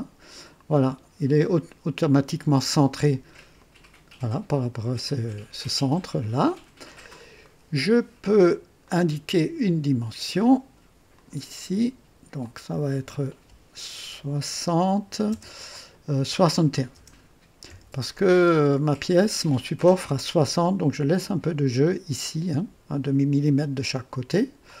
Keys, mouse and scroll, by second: 3.5 click, 6.7 scroll up 2, 7.4 right click, 8.8 right click, 11.0 click, 12.3 click, 14.4 KP_6, 15.2 KP_0, 16.8 BackSpace, 17.6 KP_1, 17.6 KP_1, 24.6 click.